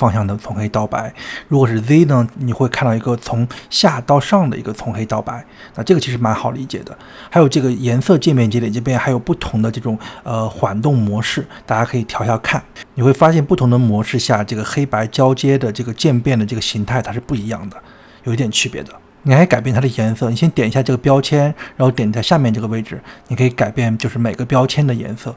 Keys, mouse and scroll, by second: 2.7 drag, 3.7-6.4 middle drag, 6.4-9.2 drag, 9.5-11.6 drag, 12.0 click, 14.8-16.8 drag, 16.9-18.9 drag, 21.2-22.5 drag, 24.0-25.3 drag.